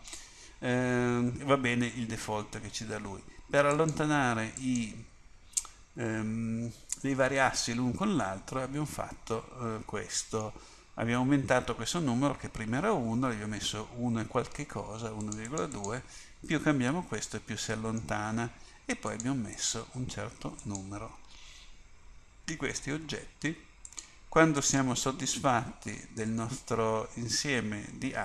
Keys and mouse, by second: 3.9-8.8 drag, 8.8 middle click, 15.3-17.6 drag, 17.4-19.2 middle drag, 19.2-22.3 drag, 22.3-26.3 middle drag, 26.3 click, 26.5 middle click.